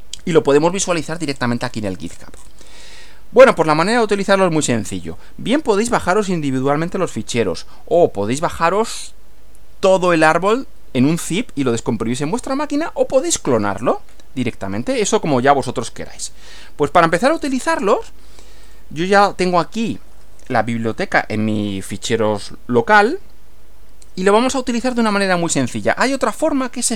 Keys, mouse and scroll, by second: 1.2-1.5 scroll up 2, 1.7-2.1 scroll down 2, 2.1-2.6 scroll up 2, 3.5 click, 7.9-8.5 scroll down 4, 17.3 click, 18.7 click.